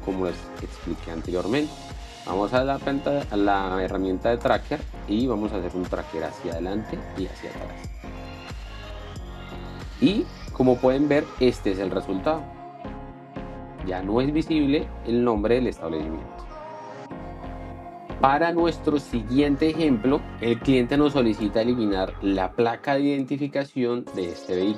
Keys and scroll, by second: 11.3 p, 12.3 space.